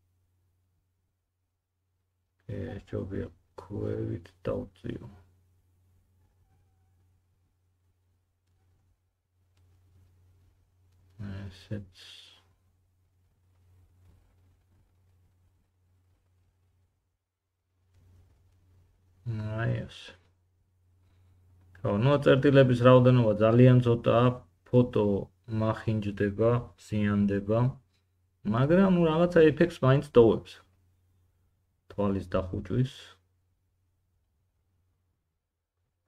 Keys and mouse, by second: 0.9 g, 14.0 g, 20.1 g, 23.2 middle click, 23.2 right click, 23.5 g, 25.6 middle click, 25.8-36.0 drag, 25.8 g, 31.6 middle click, 31.6 right click, 32.8 g.